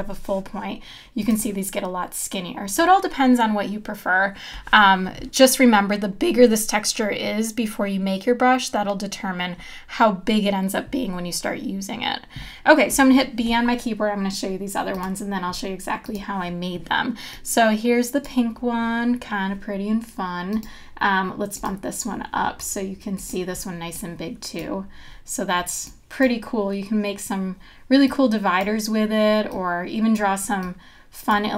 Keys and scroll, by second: 13.1 b.